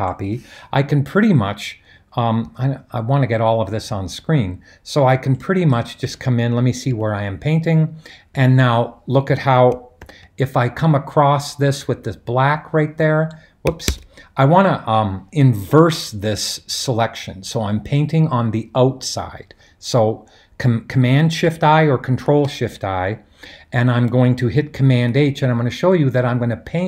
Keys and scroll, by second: 6.9 super+h, 8.3 super+h, 10.1 super+h, 13.9 super+z, 22.2 shift+super+i, 24.8 super+h.